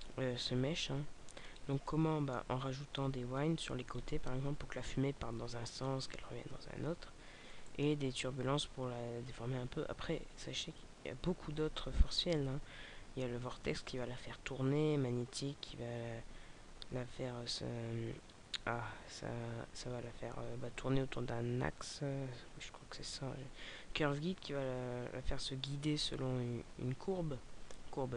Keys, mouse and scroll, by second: 0.9 click, 1.8 middle click, 7.4 middle click.